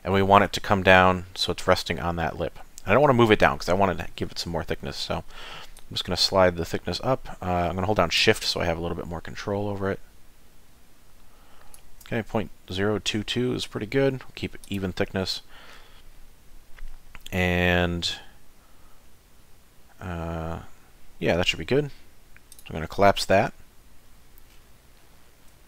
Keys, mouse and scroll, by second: 0.0 shift+middle click, 5.8 click, 14.6 click, 22.5 click, 23.4 z, 24.0 middle click, 24.5 scroll down 5, 25.0 middle click.